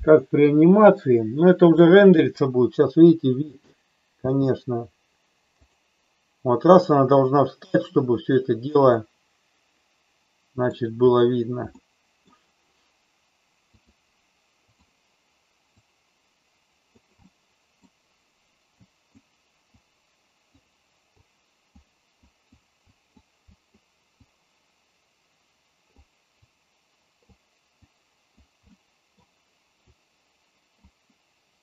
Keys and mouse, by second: 4.4 space, 5.7 click, 9.0-10.6 middle drag, 11.7 middle click, 13.7-14.9 drag, 15.7-16.9 drag, 17.2 middle click, 18.7 click, 19.9 click, 21.2 click, 22.2 click, 22.9 click, 23.5 click, 24.1-25.9 drag, 26.5 click, 27.9 click, 28.7 middle click, 29.9 click.